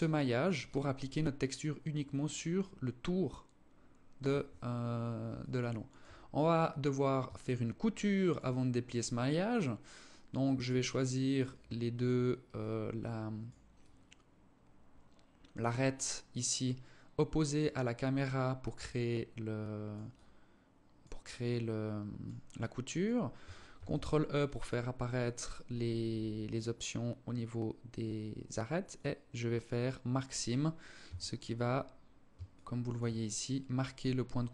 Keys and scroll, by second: 23.0 ctrl+e, 30.3 a.